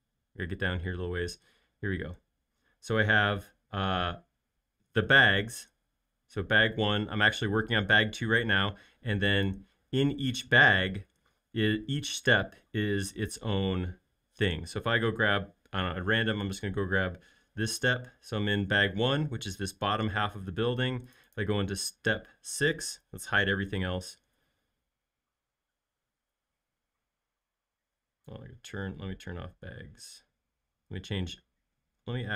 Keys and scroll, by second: 23.4-24.4 typing.